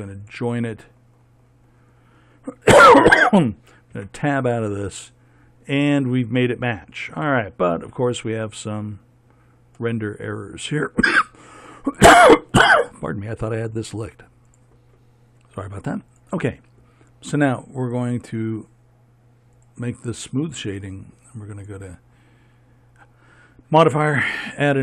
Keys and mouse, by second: 4.4 Tab, 20.1-24.7 drag.